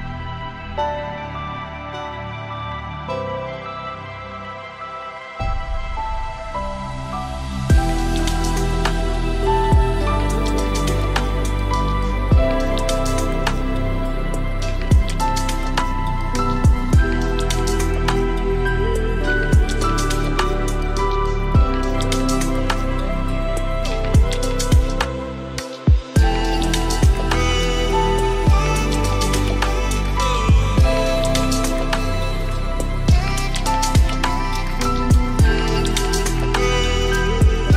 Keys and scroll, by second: 22.5 ctrl+space, 33.4 ctrl+space.